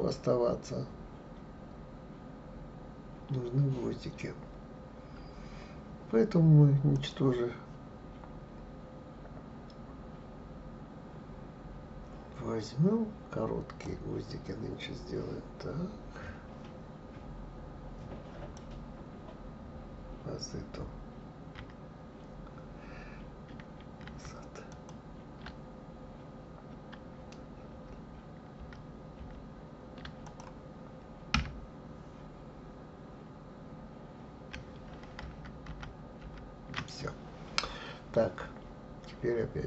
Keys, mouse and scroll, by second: 6.9-9.9 drag, 24.1 ctrl+z, 27.6 ctrl+z, 28.6 ctrl+z, 35.2 ctrl+shift+z, 35.6 ctrl+shift+z.